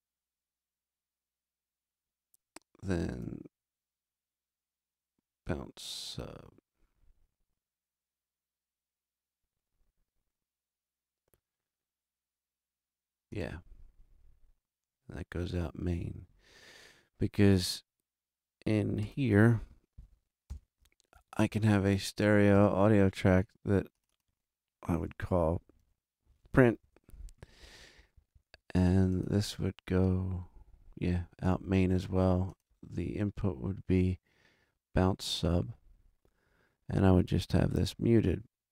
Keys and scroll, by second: 20.5 shift+super+n, 21.3 shift+super+Right, 25.3-26.9 typing.